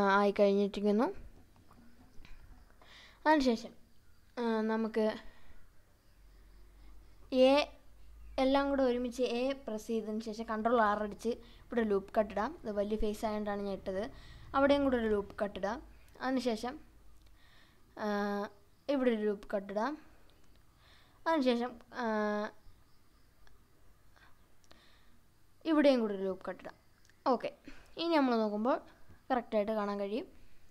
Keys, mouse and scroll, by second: 0.8 Tab, 2.4 scroll up 2, 2.7 scroll down 1, 2.8-3.5 middle drag, 3.6-4.0 scroll down 1, 4.0 Tab, 6.2 a, 7.3 ctrl+r, 9.1 right click, 9.7 scroll down 1, 9.8-10.8 middle drag, 12.1 ctrl+r, 14.0 right click, 15.1-16.1 middle drag, 17.4 ctrl+r, 19.1 right click, 20.3 Tab, 21.5 Tab, 24.7 ctrl+r, 26.7 right click, 27.7 Tab, 28.3-28.8 scroll down 2, 28.9-29.5 scroll up 2, 29.7-30.5 scroll up 1.